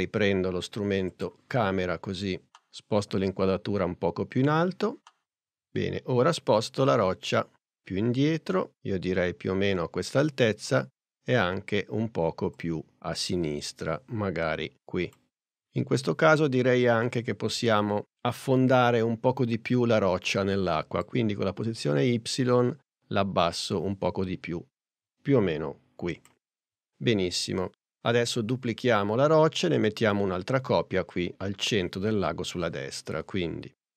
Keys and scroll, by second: 5.7 p.